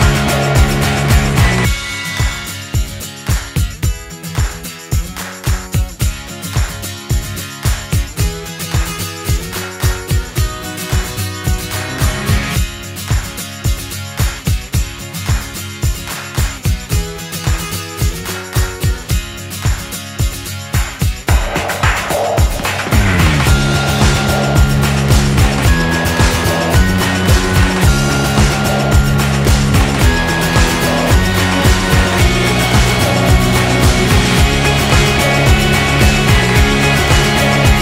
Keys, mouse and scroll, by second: 1.9 shift+d, 5.9-8.1 middle drag, 6.0 shift+r, 8.1 right click, 8.3-9.3 middle drag, 9.3-12.2 drag, 16.3-17.6 drag, 17.9-20.2 drag, 20.4-23.6 drag, 24.1-27.1 drag, 26.1-28.4 right drag, 27.1 z, 28.4 middle click, 29.2 right click, 29.2 x, 30.9 right click, 31.1 z, 31.2 middle click, 32.2 middle click, 33.4 Tab, 34.3 a, 34.7 a, 35.5 w, 37.4 z.